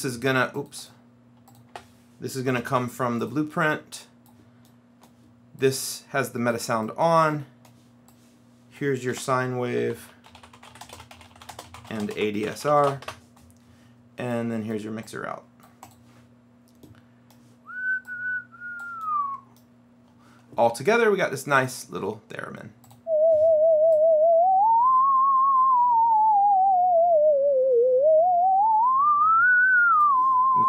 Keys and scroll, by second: 1.8 BackSpace, 2.6 Right, 2.8 space, 9.2-13.3 typing.